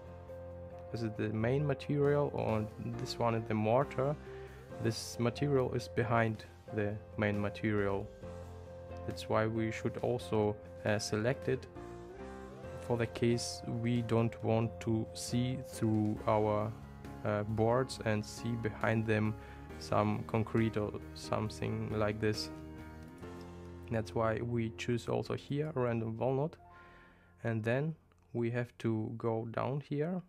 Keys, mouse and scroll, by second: 23.1-25.8 drag.